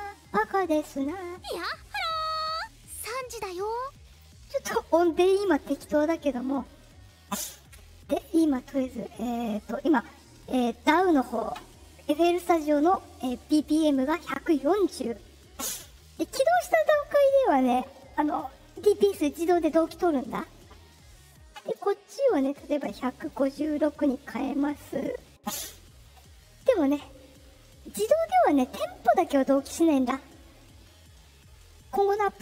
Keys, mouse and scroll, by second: 3.3 click, 8.0 click, 22.4 click, 24.9 click.